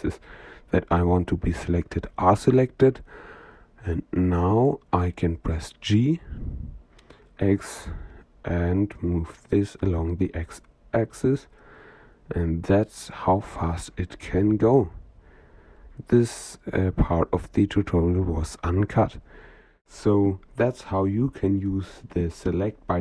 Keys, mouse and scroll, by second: 0.0-2.8 middle drag, 3.7-6.0 middle drag, 6.6 g, 13.7-15.0 middle drag, 16.5-20.4 middle drag.